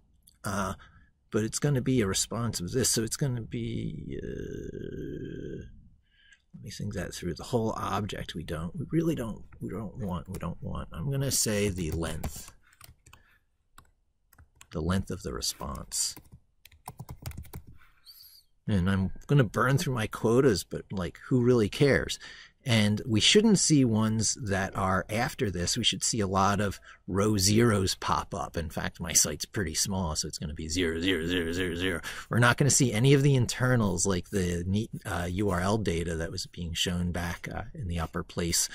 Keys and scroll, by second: 12.7 ctrl+v, 14.2 ctrl+z.